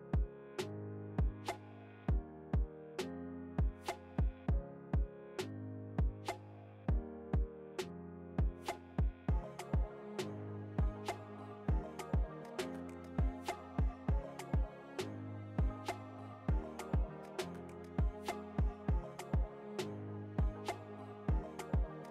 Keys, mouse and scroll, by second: 0.3 click, 4.7-6.3 drag, 6.3 ctrl+a, 8.5 Tab, 9.4 ctrl+v, 9.9 Tab, 10.8 ctrl+v, 11.2 Tab, 12.4 ctrl+v, 14.3 click, 17.5 alt+scroll down 1, 18.1-19.5 alt+scroll up 1.